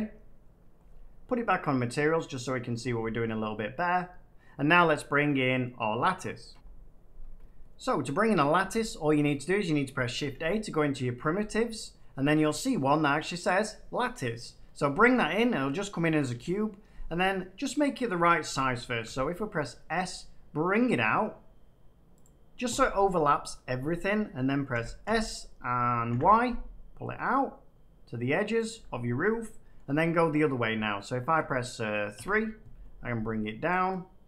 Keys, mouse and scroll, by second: 2.4 click, 3.1 click, 3.7 middle click, 6.4 F9, 8.4 middle click, 9.8 middle click, 10.2 a, 13.4 click, 16.2 7, 19.0 s, 22.1 click, 24.7 s, 25.0 x, 26.0 y, 28.6 click, 29.7 middle click, 31.3 1, 32.1 3.